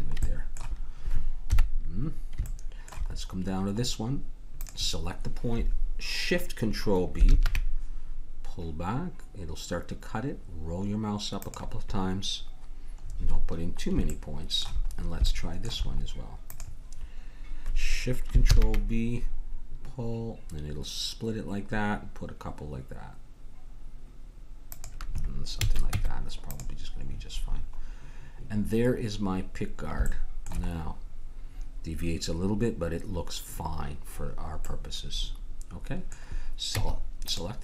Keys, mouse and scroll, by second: 1.4 KP_1, 4.6 right click, 7.2 ctrl+shift+b, 13.0-14.1 middle drag, 14.4 middle click, 15.9-18.3 drag, 20.0 ctrl+shift+b, 25.6 a, 25.9 Tab, 27.0 middle click, 27.5 middle click, 30.2 middle click, 30.8-33.3 middle drag, 34.1-36.7 middle drag, 36.7 Tab.